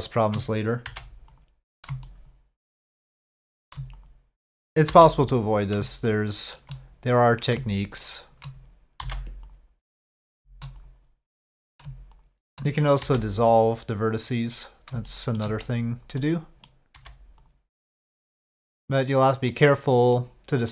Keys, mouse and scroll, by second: 0.9 m, 2.0 shift+click, 4.9 m, 6.1 shift+click, 7.4 click, 9.0 m, 10.0 shift+click, 11.7 click, 13.0 m, 15.1 shift+click, 16.2 click, 16.9 m, 18.1-19.5 middle drag, 20.1 middle click.